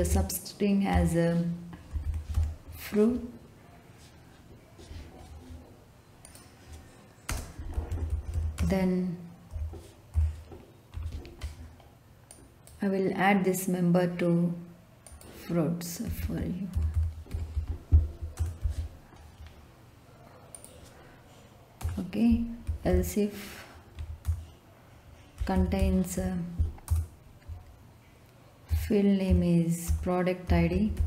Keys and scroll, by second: 0.8 Left, 1.6-2.8 typing, 7.2-9.5 typing, 10.9 Left, 15.8-18.6 typing, 21.8 Return, 22.4-23.4 typing, 24.0 Down, 24.2 Return, 25.1-26.6 typing, 26.9 Return, 28.7 i, 29.8 Left, 30.1-31.0 typing.